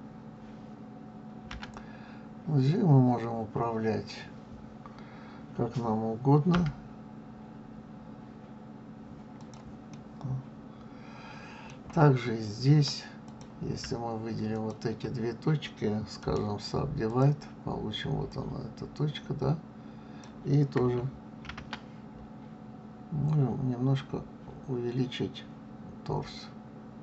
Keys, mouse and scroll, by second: 1.5 g, 9.9-13.0 middle drag, 13.2 click, 14.5 shift+click, 16.2-18.2 right drag, 18.2-20.2 drag, 21.4 ctrl+a.